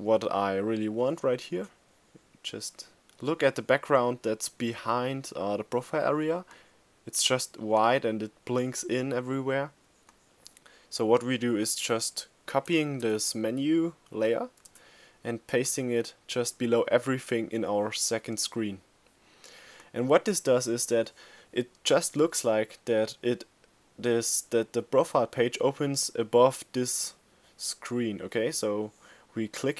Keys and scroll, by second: 12.2 super+c, 13.9 super+v.